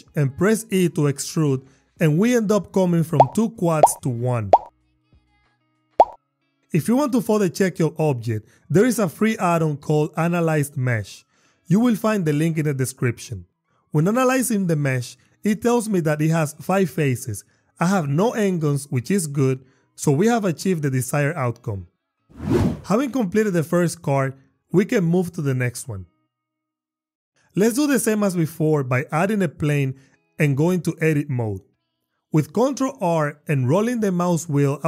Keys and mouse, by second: 0.1 e, 0.9 y, 2.6 click, 4.6 Tab, 5.5 drag, 6.2 n, 12.4 click, 20.2 click, 21.7 click, 22.6 Tab, 26.4 g, 26.6 x, 27.0 click, 27.7 shift+a, 31.1 Tab, 33.1 ctrl+r, 34.0 click, 34.5 click.